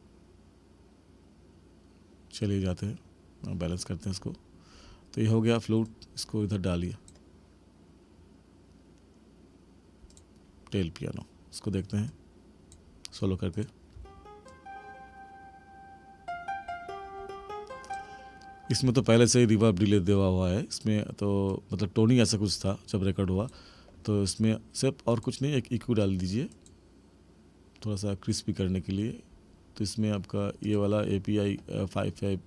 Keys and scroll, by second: 14.0 space, 18.8 space.